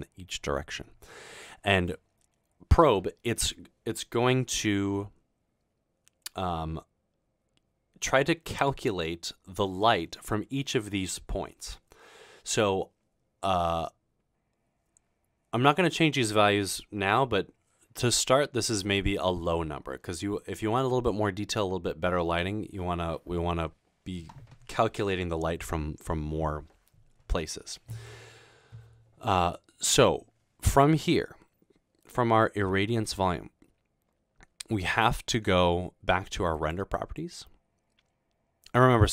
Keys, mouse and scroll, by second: 33.1 click, 36.6 click.